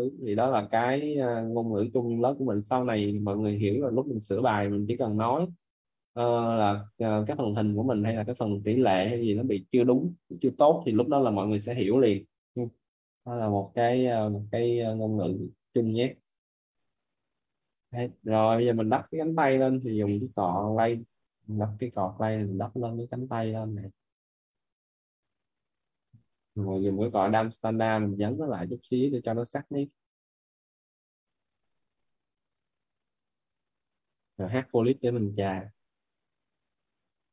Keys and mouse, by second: 0.2 click, 1.7 right click, 5.0 click, 7.1 right click, 7.6 click, 8.0 right click, 12.4 right click, 15.5 right click, 16.5 click, 19.6 b, 20.1 c, 20.5 t, 21.7 click, 26.1-27.5 typing, 27.8 click, 30.0 b, 30.3 h, 30.8 p, 31.8 click, 34.7 right click, 35.6 click, 37.0 right click.